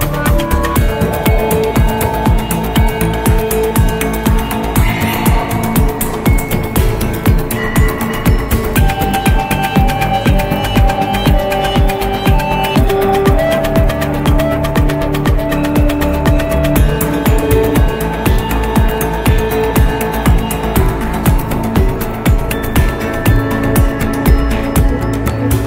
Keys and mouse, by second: 9.4 click, 13.8-15.1 drag, 17.4-19.2 drag, 22.8 click.